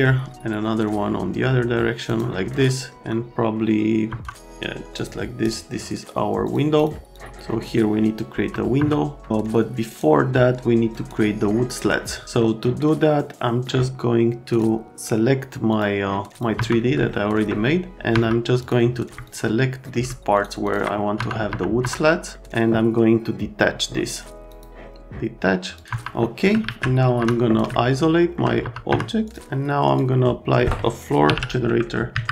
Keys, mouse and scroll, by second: 2.0 middle click, 2.5 right click, 4.1 F3, 5.0 middle click, 8.3 F3, 8.7 F3, 12.4 middle click, 13.4 middle click, 14.5 click, 15.7 click, 16.3 click, 16.5 F3, 17.1 alt+right click, 18.1 F3, 18.6 click, 19.2 ctrl+click, 19.8 right click, 20.3 ctrl+click, 20.6 ctrl+click, 21.1 F3, 21.5 F3, 21.8 F3, 22.3 middle click, 24.4 click, 25.8 click, 25.9 F3, 27.2 F3, 27.7 alt+right click, 28.6 F3, 28.9 F3, 29.2 click, 29.9 click, 31.4 k, 32.1 Down.